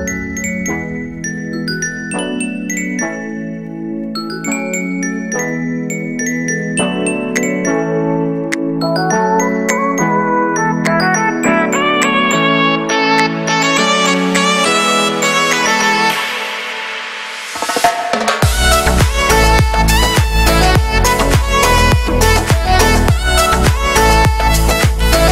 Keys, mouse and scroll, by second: 0.0 ctrl+space, 0.0 middle click, 0.1 scroll down 4, 3.1 ctrl+space, 3.1 middle click, 3.4 scroll down 1, 3.5 scroll up 1, 3.6 KP_1, 4.1 scroll up 3, 5.5 ctrl+space, 5.7 scroll down 1, 5.9 alt+right click, 6.6 shift+middle click, 6.9-7.4 scroll up 3, 7.4 alt+right click, 8.0 click, 8.7 x, 8.8 click, 9.0 x, 9.9-13.3 drag, 13.3 alt+right click, 13.7-16.3 drag, 16.3 scroll down 1, 16.6-17.1 scroll up 1, 17.1 shift+middle click, 17.6 click, 18.2 alt+right click, 18.4-19.7 drag, 19.7 alt+shift+right click, 20.4 middle click, 20.8 scroll down 1, 20.9 shift+middle click, 21.5 scroll up 2, 21.6 shift+middle click, 22.3 alt+right click, 22.7-23.8 drag, 23.8 shift+middle click, 24.5 alt+right click, 24.8-25.3 drag.